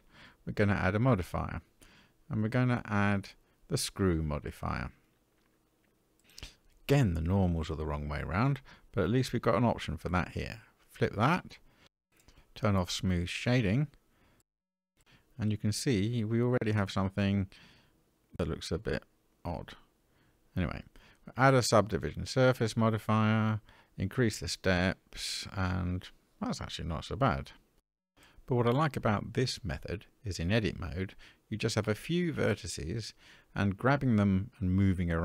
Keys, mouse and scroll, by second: 0.9 middle click, 3.1-5.9 drag, 7.5 click, 10.0 click, 11.9 click, 13.3-15.2 middle drag, 17.4-18.2 middle drag, 19.8-21.9 drag, 23.6 click, 23.8 click, 25.6-28.7 middle drag, 29.2 Tab, 30.1 middle click.